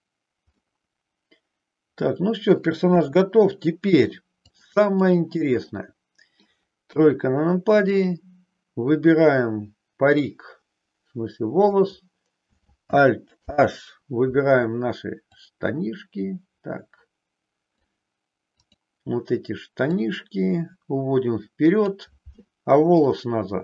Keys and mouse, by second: 0.6-2.6 middle drag, 3.0 KP_1, 4.5 click, 5.6 middle click, 7.0 KP_3, 10.2-11.7 drag, 13.4 alt+h, 15.2-17.8 drag, 18.6 click, 19.8-22.0 drag, 23.0-23.6 middle drag.